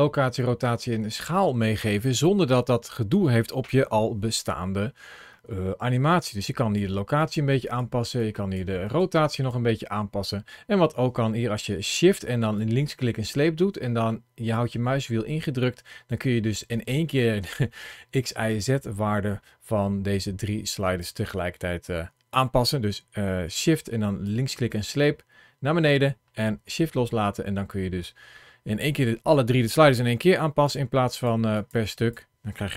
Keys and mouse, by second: 5.9 click, 7.0 click, 7.5 click, 8.0 click, 8.7 click, 9.2 click, 12.4-20.8 shift+drag, 24.1-30.0 shift+drag, 30.5 click, 30.9 click, 31.4 click, 31.8 click.